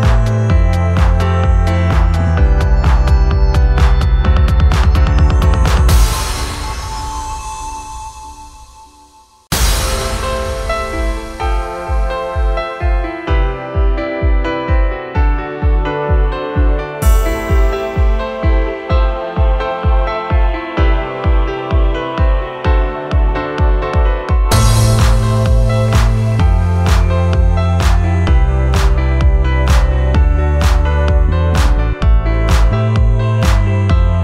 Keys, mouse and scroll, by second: 6.1 shift+e.